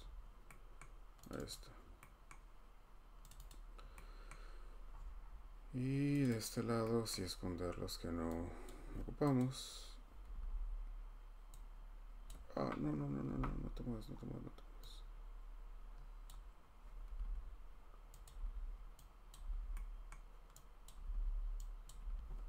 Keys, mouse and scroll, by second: 0.0 scroll down 3, 0.8 scroll up 1, 1.3 click, 1.5 click, 1.8 scroll down 1, 1.9-2.3 scroll, 3.3 click, 3.5 click, 3.8-4.4 scroll, 4.9-6.2 scroll, 6.2 click, 6.4 click, 7.1-7.5 scroll, 8.6 click, 9.4 click, 10.3 h, 10.4 h, 12.3 click, 13.2 ctrl+z, 14.1 scroll, 16.2 click, 17.0 h, 17.2 h, 18.2 click, 18.3-19.5 typing, 20.1 scroll, 20.8 click, 20.9-22.1 typing, 21.8 click, 22.4 middle click.